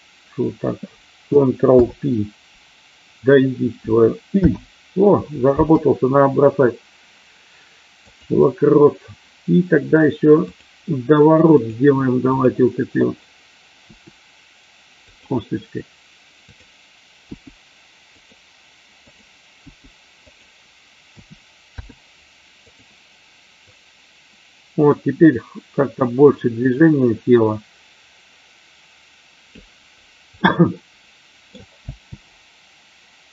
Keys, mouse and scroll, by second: 1.6 ctrl+p, 4.2 i, 10.3 click, 11.5 click, 13.7 r, 15.1 click, 17.3 g, 18.1 click, 19.0 click, 19.5 g, 20.3 click, 21.0 a, 21.6 i, 23.8-29.6 drag, 30.4-31.5 middle drag, 31.8 space.